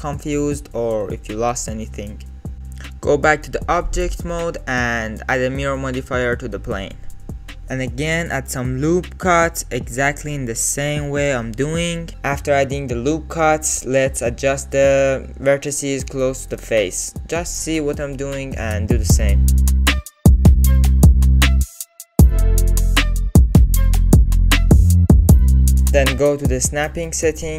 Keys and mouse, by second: 0.1 click, 0.4 middle click, 2.1 click, 3.1 KP_1, 4.6 Tab, 5.9-7.2 drag, 7.6 Tab, 9.6 ctrl+r, 10.6 ctrl+r, 11.7 ctrl+r, 13.6 ctrl+r, 16.0 ctrl+r, 17.5 click, 18.3 x, 19.1 click, 19.5 x, 20.2 click, 20.6 x, 21.2 click, 21.7 click, 22.4 g, 23.3 alt+z, 23.9 alt+z, 26.3-27.5 drag.